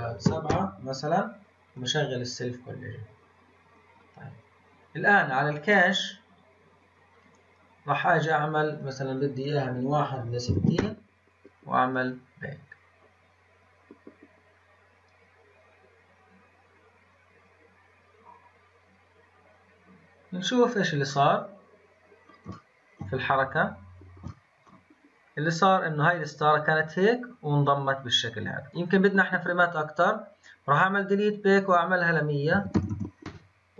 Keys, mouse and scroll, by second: 2.7-4.7 scroll up 17, 4.8-5.9 scroll down 8, 5.9-7.1 scroll down 7, 7.1-11.7 drag, 11.8-19.0 drag, 20.1-21.1 scroll down 3, 21.1-23.0 middle drag, 23.0 scroll down 1, 23.2-24.2 scroll up 3, 24.2-25.5 shift+middle drag, 25.5-28.6 drag, 30.7-32.8 drag, 32.8 KP_0.